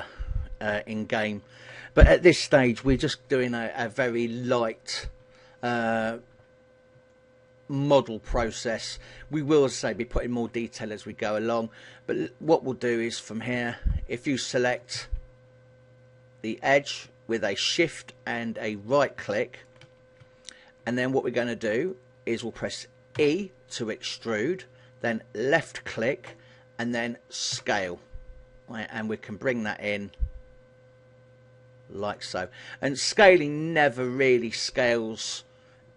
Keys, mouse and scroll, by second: 7.2 middle click, 11.2 KP_1, 12.1 scroll up 2, 12.5 shift+middle click, 13.6 alt+right click, 14.4 middle click, 15.0 a, 16.9 alt+right click, 19.4 middle click, 20.3 KP_1, 21.2 middle click, 22.0 middle click, 23.3 e, 25.6 click, 27.7 s, 32.2 click, 32.6 middle click, 34.0 KP_1, 34.8 shift+middle click.